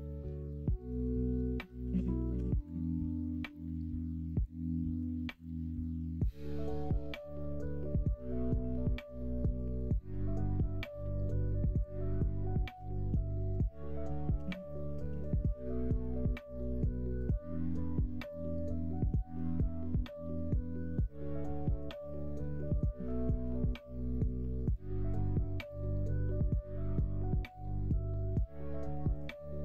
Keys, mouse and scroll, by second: 0.8 ctrl+z, 1.2 ctrl+z, 1.5 ctrl+z, 1.8 ctrl+z, 2.2 ctrl+z, 3.7 click, 4.9 1, 5.7 shift+click, 6.2 click, 7.5 middle click, 8.5 shift+click, 9.1 click, 9.4 click, 9.7 click, 10.3 click, 11.2 click, 12.6 ctrl+z, 12.8 ctrl+z, 13.0 ctrl+z, 13.2 ctrl+z, 13.5 ctrl+z, 13.7 ctrl+z, 13.9 ctrl+z, 14.3 ctrl+z, 14.7 middle click, 15.0 ctrl+z, 15.4 middle click, 16.3 middle click, 16.8 middle click, 19.3 e, 23.0 1, 23.4 click, 24.2 shift+click, 25.5 m, 27.8 middle click, 29.1 click.